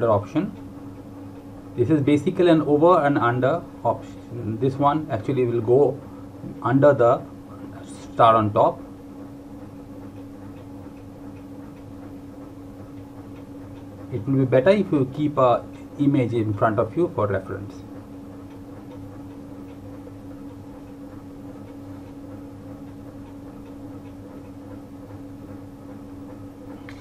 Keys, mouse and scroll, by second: 6.7 click, 17.2 click.